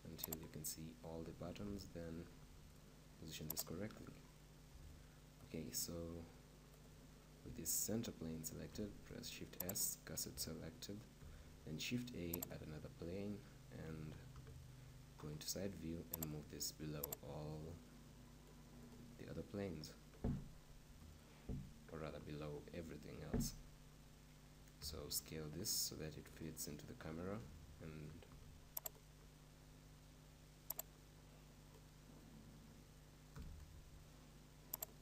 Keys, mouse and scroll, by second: 0.4-2.4 drag, 1.6 g, 3.7-5.7 drag, 5.6-8.5 right drag, 8.7 shift+s, 14.3 KP_3, 15.2-16.2 middle drag, 16.2-19.1 drag, 20.8 KP_0, 24.8 s, 28.9-32.6 drag, 33.3 s, 34.9-35.0 drag.